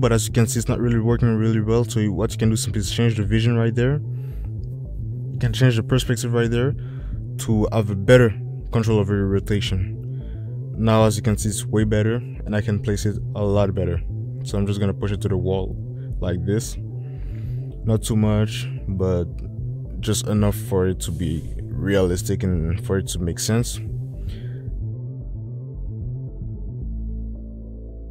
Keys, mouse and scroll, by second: 4.2 ctrl+shift+z, 5.8 click, 10.4-12.6 drag, 16.1 drag.